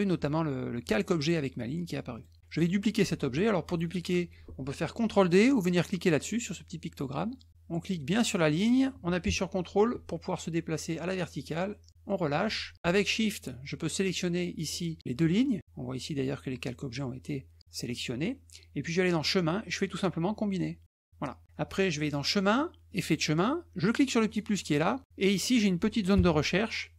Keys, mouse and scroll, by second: 2.1 click, 8.0-12.0 drag, 13.9 shift+click, 19.1 click, 20.8 click, 22.0 click, 22.9 click, 24.2 click, 25.3 click, 26.1 BackSpace.